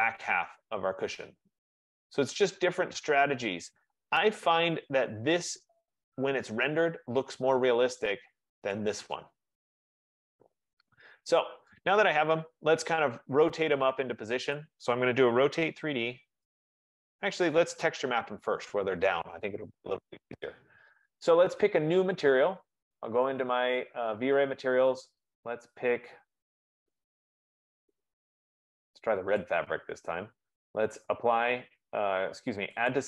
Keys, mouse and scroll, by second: 0.2 click, 1.3 middle click, 1.8 click, 4.0 right click, 4.7 F15, 5.0 click, 8.3 right click, 8.9 click, 10.3 click, 11.6 middle click, 13.3 right click, 14.7 click, 16.2-17.4 typing, 18.0 Escape, 18.2 Escape, 23.6 click, 25.7 middle click, 26.3 middle click, 27.1 middle click, 28.5 click, 29.5 right click.